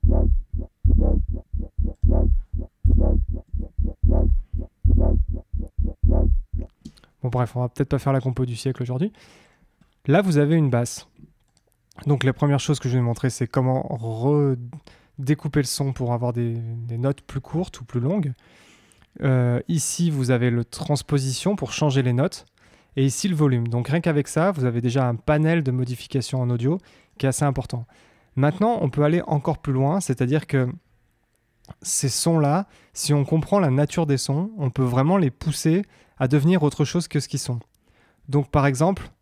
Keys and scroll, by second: 2.9 Up, 6.8 space.